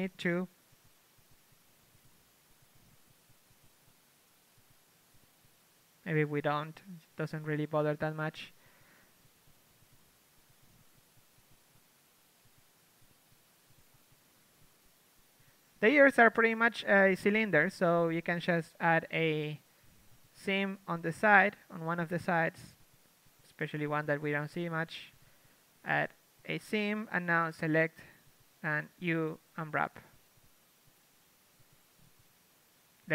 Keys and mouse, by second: 1.6 z, 2.9 ctrl+Tab, 3.0 z, 3.8 z, 4.6 z, 5.0 z, 7.1-9.6 typing, 9.1 Tab, 10.8 Tab, 13.6 z, 14.0 z, 14.9 z, 15.5 z, 19.3 z, 21.7 z, 22.8 z, 24.2 z, 26.7 ctrl+e, 27.6 ctrl+Tab, 29.1 l, 29.8 l, 32.8 u.